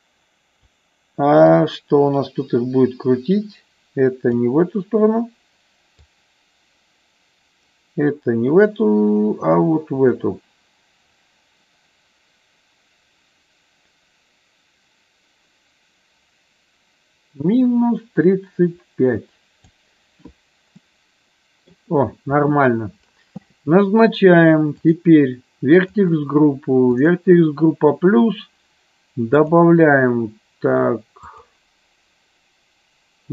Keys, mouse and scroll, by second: 1.5-5.3 drag, 6.1-20.0 drag, 20.8 middle click, 25.7 click, 26.9 click, 29.3-31.5 drag.